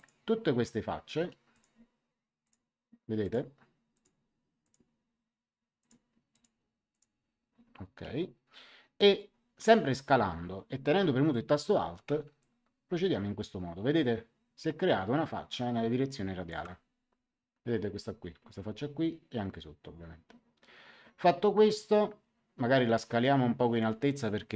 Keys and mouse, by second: 1.5 click, 5.7 click, 12.3 click.